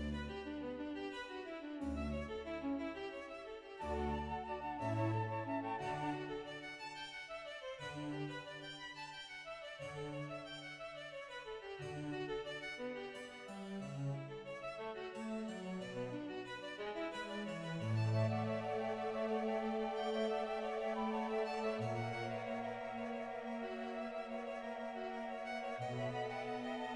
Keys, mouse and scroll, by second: 0.2 g, 2.8 shift+middle click, 3.3 click, 3.4-4.0 scroll down 2, 4.0 right click, 4.0 g, 4.3 click, 4.3-5.2 scroll up 1, 5.2 middle click, 5.2 right click, 5.2 scroll down 1, 5.5 click, 6.5 scroll down 1, 6.5 scroll up 2, 6.6 scroll down 1, 6.7 ctrl+right click, 7.0 o, 7.4-8.0 scroll up 5, 8.3 click, 8.9 right click, 9.1 shift+middle click, 9.1 ctrl+right click, 9.1 scroll down 1, 9.3 shift+middle click, 9.3 o, 11.5 shift+middle click, 11.9 ctrl+right click, 12.3 shift+click, 12.5 shift+middle click, 13.4 click, 13.4 right click, 13.4 g, 13.6 ctrl+right click, 13.6 shift+middle click, 13.6-14.1 scroll up 1, 14.6 ctrl+right click, 14.6 shift+middle click, 14.6 1, 14.8 shift+click, 14.8 g, 14.8 z, 15.6 right click, 15.8 shift+click, 15.8 g, 16.6-17.3 scroll down 1, 17.4 right click, 17.6 g, 17.7 click, 18.7 click, 18.7 right click, 18.9 right click, 18.9-19.6 scroll down 2, 19.6 click, 19.6 g, 19.8 right click, 21.0 Tab, 22.5 scroll down 2, 22.7-23.0 scroll up 1, 23.0-24.2 middle drag, 24.2 shift+z.